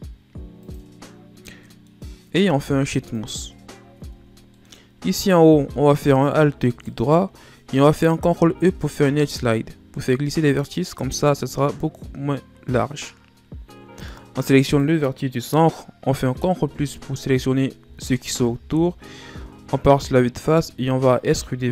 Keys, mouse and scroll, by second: 1.3-1.7 middle drag, 1.7-2.2 scroll up 2, 2.2 w, 3.6 Tab, 4.0 scroll down 1, 4.2 middle click, 4.5 scroll up 2, 5.1 middle click, 5.5 scroll up 2, 6.3 alt+right click, 7.9 ctrl+e, 14.2 right click, 16.3 ctrl+KP_Add, 18.3 KP_1, 19.8-20.7 shift+scroll up 11, 20.7-21.3 ctrl+scroll up 1, 21.3 scroll up 1.